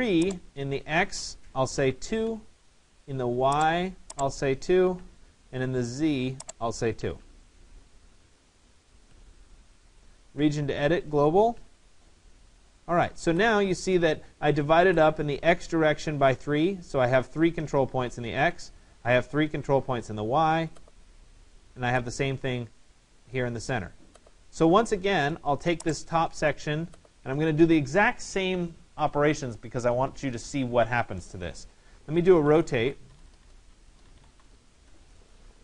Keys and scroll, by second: 1.8 2, 2.3 Return, 4.9 2, 5.1 Return, 7.1 2, 7.3 Return, 32.8 BackSpace, 34.8 Return.